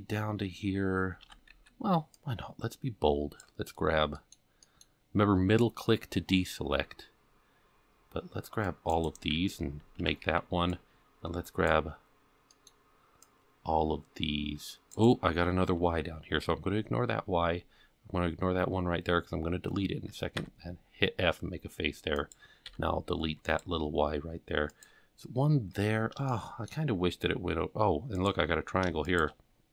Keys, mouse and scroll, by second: 1.3 alt+a, 1.5 c, 9.3 f, 10.0 alt+a, 10.2 c, 20.4 f, 22.2 click, 22.7 x, 24.7 click, 26.0 scroll up 1, 26.3 shift+middle click, 26.9-27.5 scroll up 1, 27.5 scroll up 2, 28.2 click, 29.1 shift+click.